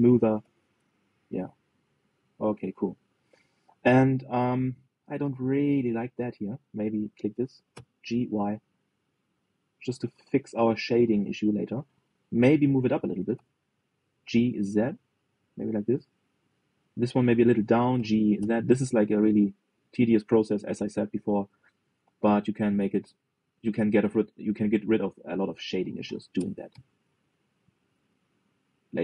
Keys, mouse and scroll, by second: 0.6 click, 1.0 g, 2.4-2.8 scroll down 1, 2.8 click, 3.1-5.5 middle drag, 5.5 scroll up 1, 5.7 shift+middle click, 6.2 scroll up 1, 6.4 middle click, 7.3 click, 8.4 g, 11.4 click, 11.8-13.0 middle drag, 13.0 click, 13.6 g, 17.1 middle click, 18.0 click, 18.6 g, 21.8-24.8 middle drag, 24.8 click, 25.4-25.9 scroll up 1, 26.3 g.